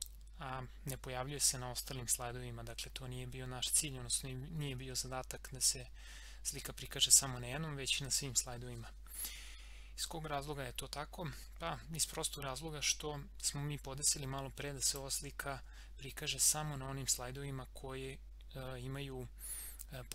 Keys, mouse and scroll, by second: 1.2 scroll up 1, 1.4 scroll down 1, 3.8 scroll up 1, 14.8 click.